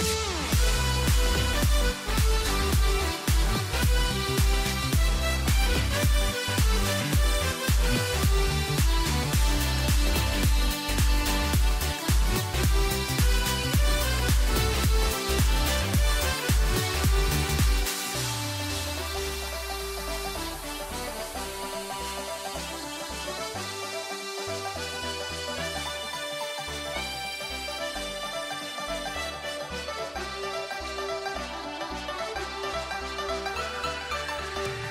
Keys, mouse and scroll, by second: 0.0 click, 0.2 middle click, 0.3 Tab, 0.4 scroll up 1, 0.5-0.9 middle drag, 0.9 Tab, 1.0 middle click, 1.9 scroll up 5, 2.0 middle click, 2.3 Tab, 2.5 shift+middle click, 3.4 click, 4.4 click, 4.8 a, 4.9 a, 5.2 alt+shift+click, 5.5 alt+shift+click, 5.7 a, 5.8 a, 6.7 alt+shift+click, 7.1 alt+shift+click, 7.4 middle click, 7.6 s, 8.6 Tab, 8.8 scroll down 1, 8.8 middle click, 9.0 a, 9.1 a, 9.3 scroll down 1, 9.5-9.8 scroll up 11, 9.9 click, 10.1 Tab, 10.5 s, 12.1 scroll down 4, 12.3 Tab, 12.6 a, 12.6-14.1 middle drag, 14.5 scroll down 4, 14.7 a, 14.9 ctrl+s, 15.1 middle click, 15.4 middle click, 15.5 click, 15.6 scroll up 3, 15.7 Tab, 16.7 g, 18.5 Tab, 18.7 scroll down 3, 18.7 middle click, 18.9 a, 19.0 a, 19.4 scroll down 1, 19.5 middle click, 20.2 click, 20.4-20.8 right drag, 20.8 scroll down 1, 21.0 middle click, 21.4 a, 21.8 a, 21.9 a, 22.0 ctrl+s, 22.1-23.5 middle drag, 23.5 KP_1, 23.7 u, 23.9 z, 24.3 shift+a, 25.9-31.1 typing, 32.6 Tab, 32.8 shift+middle click, 33.0-33.4 scroll up 2, 33.4 shift+middle click, 33.7 a, 33.9 a, 34.3 click, 34.8 c.